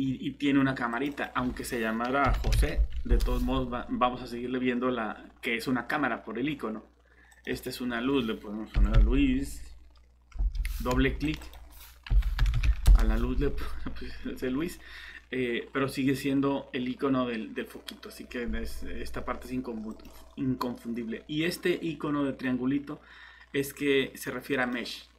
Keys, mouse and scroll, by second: 2.2 j, 2.4 o, 2.5 s, 2.7 e, 3.1 Return, 8.7 l, 8.9 i, 10.4 BackSpace, 10.9 Escape, 12.1 l, 12.4 u, 12.5 i, 12.6 s, 12.9 Return.